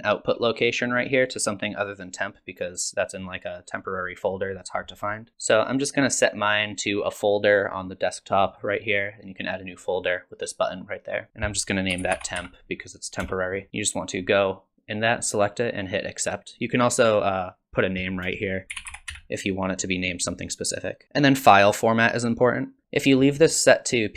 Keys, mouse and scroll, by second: 6.1 click, 21.0-22.6 scroll down 4.